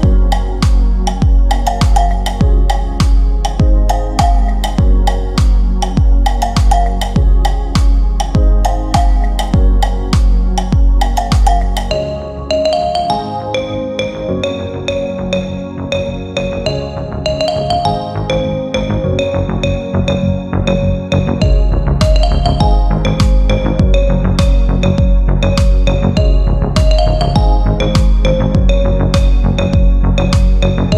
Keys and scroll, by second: 0.5 c, 3.1 KP_Add, 12.0 c, 20.7 Delete.